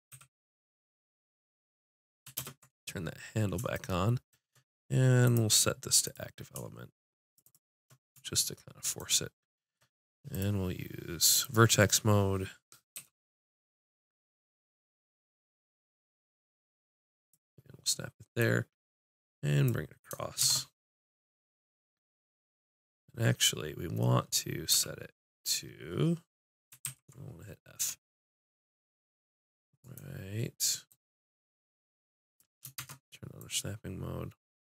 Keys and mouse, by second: 0.1 a, 2.4 ctrl+space, 5.9-12.9 drag, 16.1 g, 17.3-20.4 drag, 20.4 shift+Tab, 21.0-24.7 middle drag, 24.7 f, 26.0 middle click, 26.8 ctrl+z, 27.8 g, 30.9-32.8 drag, 32.8 shift+Tab, 33.5-34.7 drag.